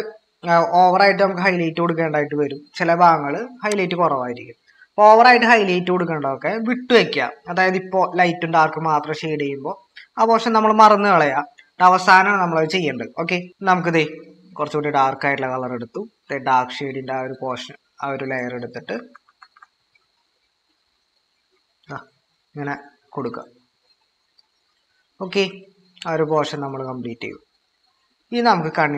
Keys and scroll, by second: 5.1 ctrl+-, 18.9-19.5 typing, 23.7 typing.